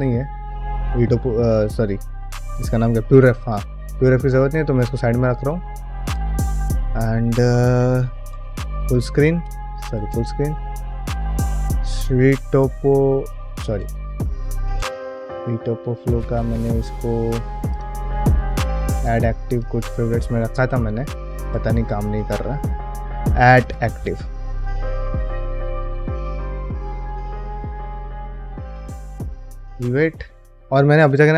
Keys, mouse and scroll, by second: 7.5 middle drag, 7.9 ctrl+middle drag, 8.3 ctrl+space, 8.6-9.0 shift+middle drag, 9.3 ctrl+space, 9.8 ctrl+alt+space, 10.3 q, 13.5 ctrl+alt+space, 16.4 right click, 17.5-19.7 drag, 20.1 ctrl+space, 21.4 ctrl+alt+space, 21.8 q.